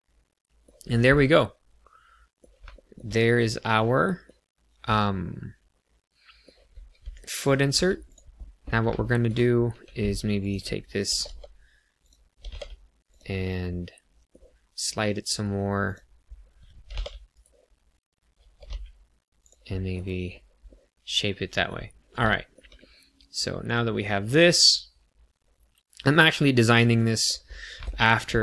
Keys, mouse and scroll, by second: 0.8-1.1 scroll down 1, 1.1 middle click, 2.7 shift+middle click, 3.1 middle click, 5.2 middle click, 7.6 1, 8.0 click, 8.3-9.1 scroll up 3, 8.9 shift+middle click, 9.6 2, 10.3 click, 11.1 g, 11.2 g, 12.0 click, 12.4 g, 12.5 z, 13.0 click, 13.4 middle click, 15.8 click, 16.8 g, 17.3 right click, 18.4 g, 18.7 y, 19.4 click, 19.7 middle click, 20.2 scroll down 1, 20.6 middle click, 22.2 shift+middle click, 22.7 middle click, 27.4 scroll up 1, 27.7 shift+middle click, 28.1 shift+scroll down 1, 28.3 middle click.